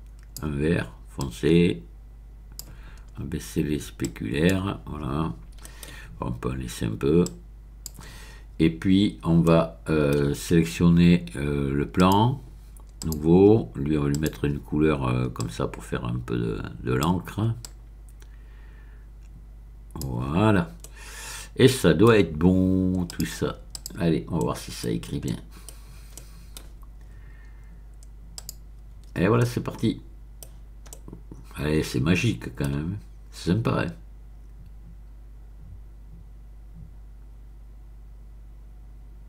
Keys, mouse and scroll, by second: 1.2-3.0 drag, 3.1-3.8 scroll down 1, 4.0 click, 5.6 middle click, 7.2 click, 9.0-9.4 scroll up 1, 9.4 middle click, 11.9 click, 13.0 click, 14.1 click, 15.4-17.2 drag, 17.6-20.4 drag, 20.8-22.1 middle drag, 23.1 click, 23.7 click, 24.4 middle click, 24.8-25.2 scroll down 1, 25.2 middle click, 25.7-26.1 scroll down 1, 26.1 middle click, 28.3 click, 29.4-30.5 middle drag, 30.5-30.9 scroll down 1, 30.9-32.8 middle drag, 33.3-35.5 middle drag.